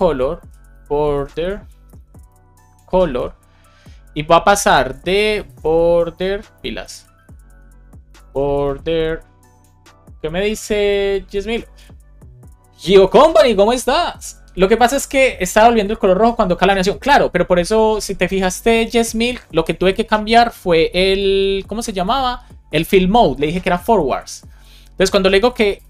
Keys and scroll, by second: 0.3 shift+b, 1.0 BackSpace, 1.7 BackSpace, 2.5 shift+c, 6.0 Right, 6.8 Left, 9.3 Return.